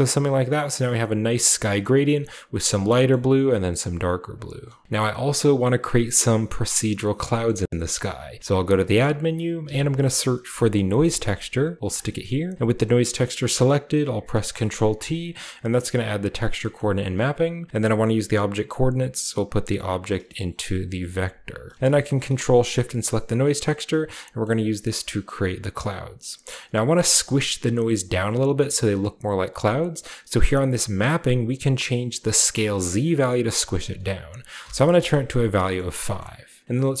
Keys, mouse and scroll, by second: 4.3 click, 4.8 typing, 7.5-8.4 scroll up 2, 8.4 typing, 8.8 click, 9.6 typing, 10.4 Return, 11.8 click, 11.9 typing, 14.1 ctrl+t, 14.5-15.9 ctrl+middle drag, 14.5-16.4 ctrl+scroll up 1, 14.9 a, 15.7 click, 16.2 middle drag, 16.7-17.5 drag, 18.7-19.7 drag, 19.9 click, 20.5 click, 20.8 click, 20.9-21.7 typing, 21.2 click, 21.6-22.1 ctrl+drag, 22.2-23.8 ctrl+shift+drag, 24.4 middle click, 25.2-26.8 middle drag, 25.3 typing, 25.7-27.7 scroll up 1, 28.9-29.8 scroll up 1, 29.8-30.4 scroll up 1, 32.2-33.4 drag, 33.7 click, 34.9 click, 35.4 click, 35.4-36.6 scroll down 1, 35.5-37.0 middle drag, 36.6 click, 36.7-37.0 scroll up 1.